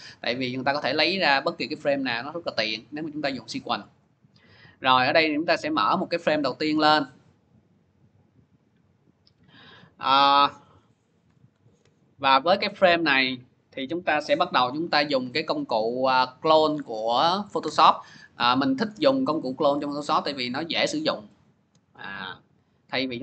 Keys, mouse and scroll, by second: 0.5 click, 1.4 click, 1.8 click, 2.7 click, 3.3 click, 3.8 click, 4.8 click, 5.0 click, 10.4 click, 10.6 ctrl+=, 11.1 ctrl+=, 11.4-13.3 typing, 12.2-12.9 scroll, 12.8 click, 17.4 scroll, 18.0 scroll, 18.7-22.7 drag.